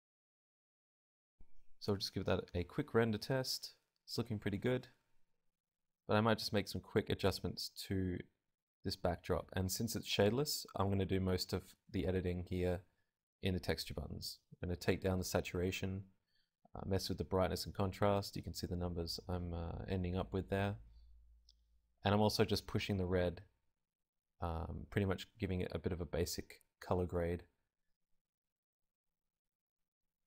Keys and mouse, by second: 0.6 middle click, 1.5-2.9 drag, 3.5 F12, 3.9-5.1 middle drag, 5.1 right click, 5.9 KP_0, 6.2 g, 7.2 right click, 7.7-9.5 drag, 10.0 click, 13.2-17.9 drag, 18.0-22.9 drag, 23.5-24.6 drag, 25.4-27.9 drag, 28.7 click, 29.2 F12.